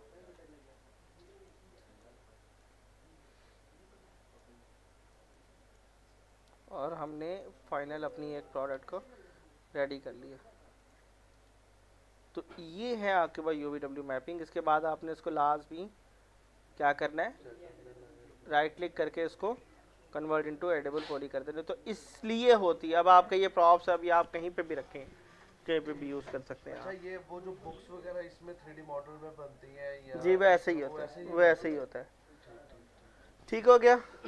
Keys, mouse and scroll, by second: 0.7-1.3 scroll up 1, 1.3 middle click, 1.8 click, 4.6 scroll down 1, 5.1 middle click, 7.1 click, 8.3 alt+middle click, 9.0 middle click, 9.3 scroll down 1, 10.8 click, 11.3 right click, 12.7 click, 13.2 scroll up 1, 14.1 alt+middle click, 14.5 scroll up 1, 15.4-17.3 middle drag, 17.3-19.1 alt+middle drag, 19.1 scroll down 1, 19.3 middle click, 19.8 scroll up 1, 20.4 alt+middle click, 20.5 scroll down 1, 20.7-22.3 alt+middle drag, 22.3 scroll up 1, 22.7-23.3 alt+scroll down 2, 23.3 alt+middle click.